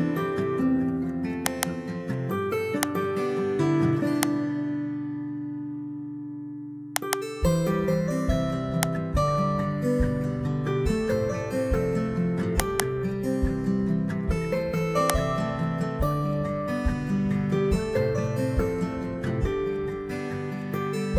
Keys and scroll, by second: 0.1 ctrl+x, 3.6 Return, 5.0 ctrl+v, 11.0 ctrl+x, 15.9 Return, 16.5 Up, 17.6 ctrl+v.